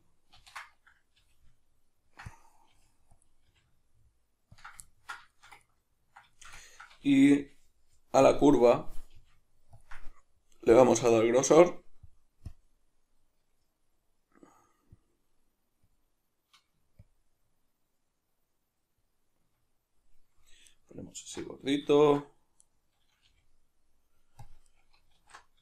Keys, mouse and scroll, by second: 0.4 ctrl+i, 1.2 g, 2.3 click, 2.7 g, 3.3 click, 3.5 g, 4.6 ctrl+click, 4.9-8.3 ctrl+middle drag, 7.4 g, 8.3 click, 9.2 g, 9.8 ctrl+click, 10.7 drag, 12.0-20.7 drag, 20.7 right click, 21.2 alt+q, 21.9-22.6 ctrl+middle drag, 22.6 right click, 23.3 g, 24.5 click, 24.7 right click, 25.2 alt+q.